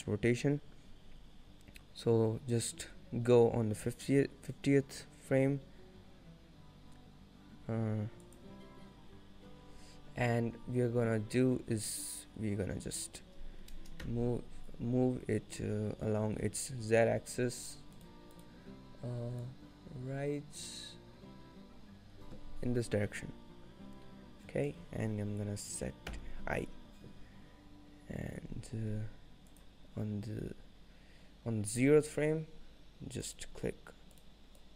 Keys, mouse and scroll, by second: 16.4 n, 17.7 click, 18.0 click, 19.5 click, 29.6 click, 33.3 click, 34.6 click.